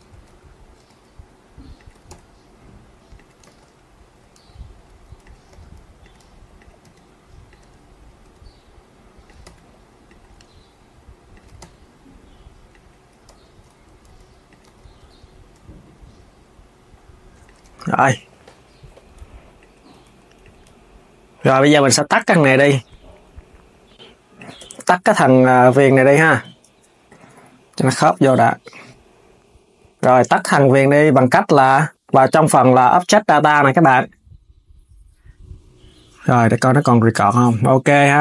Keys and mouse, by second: 0.0 KP_3, 0.6 s, 1.8 g, 3.2 z, 4.9 click, 6.2 click, 6.5 g, 13.0 KP_1, 13.8 g, 14.3 KP_3, 15.2 alt+s, 17.2 alt+s, 17.5 Tab, 17.7 click, 18.1 s, 19.3 click, 19.6 Tab, 20.1 click, 20.4 g, 21.9 click, 22.6 r, 24.3 Tab, 25.1 click, 26.4 Tab, 26.8 click, 27.0 g, 29.5 s, 29.7 KP_3, 30.3 Tab, 31.8 click, 37.8 click.